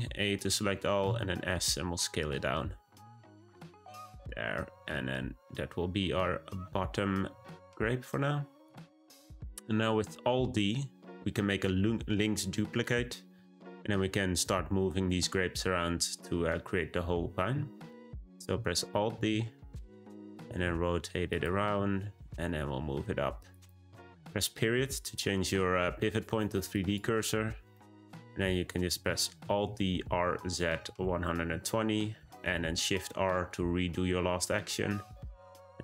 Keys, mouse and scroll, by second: 1.0 s, 4.2 Tab, 4.7 g, 19.1 alt+d, 20.4 r, 21.6 g, 24.5 ., 27.7-29.4 middle drag, 29.4 alt+d, 32.0 shift+r, 33.0-35.0 middle drag, 35.0 `.